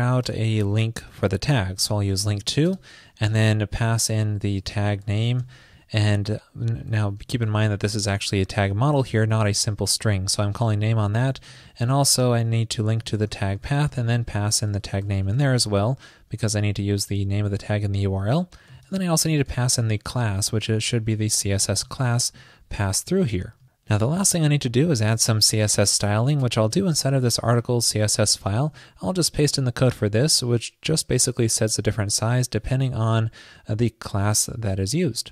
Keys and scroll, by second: 0.4 super+Return, 1.8 ctrl+shift+., 7.1 alt+Left, 7.1 alt+Left, 9.4 alt+Right, 28.7 super+v.